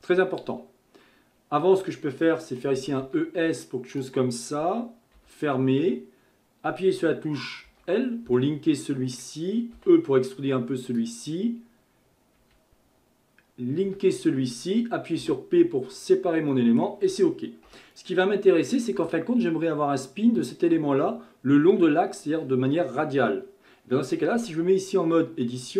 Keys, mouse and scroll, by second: 1.3-2.6 scroll up 3, 2.6 scroll up 1, 2.8 e, 8.4-9.8 middle drag, 9.8 e, 16.5-17.7 middle drag, 17.7 KP_1, 24.4 Tab.